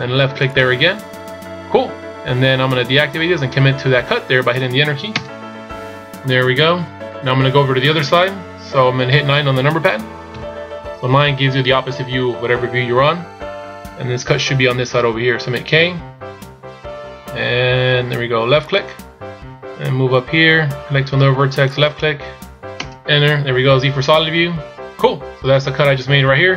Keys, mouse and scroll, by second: 10.4 KP_9.